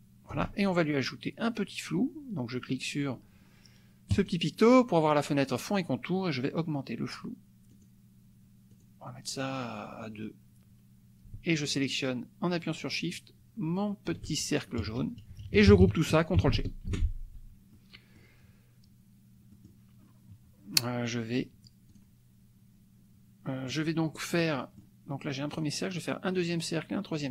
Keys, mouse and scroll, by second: 4.3 click, 7.7 click, 8.7-9.7 drag, 11.6 shift+click, 14.8 KP_Add, 15.1 KP_Subtract, 16.9 ctrl+g, 17.7 click, 19.5 click, 21.9 click, 24.4 click, 25.5 click, 26.3 click.